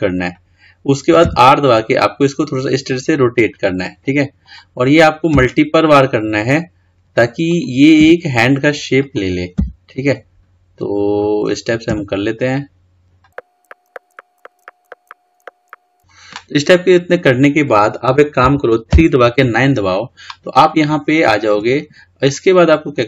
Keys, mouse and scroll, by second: 18.4 KP_3, 19.0 KP_9, 21.8-22.3 scroll down 4, 22.3-23.0 scroll up 2.